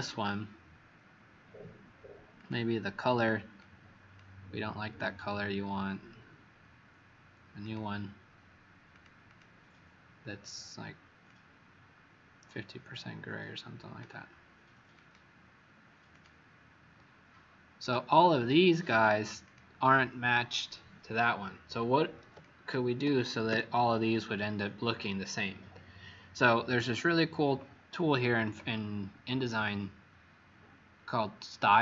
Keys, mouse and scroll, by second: 9.2 click, 11.2 click, 18.3 click, 18.8 click, 19.4 click, 22.4 click, 23.4 w.